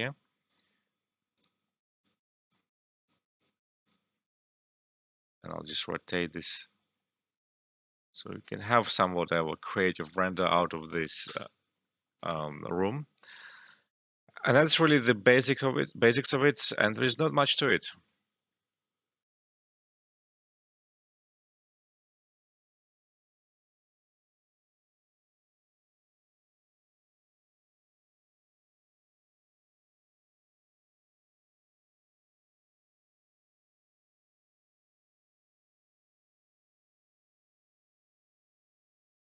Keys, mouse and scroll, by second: 19.1 ctrl+Num_Lock.